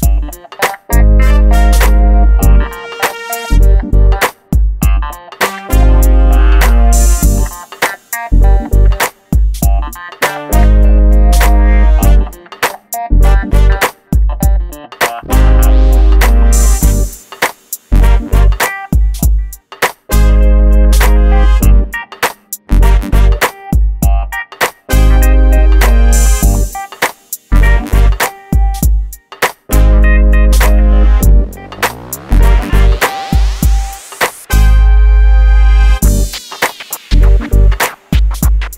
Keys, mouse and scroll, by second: 0.2 scroll down 1, 0.5 shift+middle click, 1.9 click, 8.0 shift+middle click, 8.5 scroll up 1, 9.4-10.3 scroll up 1, 10.3 click, 16.8-17.3 scroll up 1, 17.3-17.7 scroll down 1, 17.7 scroll up 1, 18.7 click, 20.6 scroll up 1, 21.5 click, 21.9 scroll down 1, 22.8 click, 23.6 shift+middle click, 24.8 ctrl+click, 26.3 right click, 28.1 click, 33.1-33.8 scroll up 1, 34.1-35.0 scroll up 1, 35.0 click, 36.0 scroll down 1, 37.0-37.3 scroll up 1, 37.6 Escape.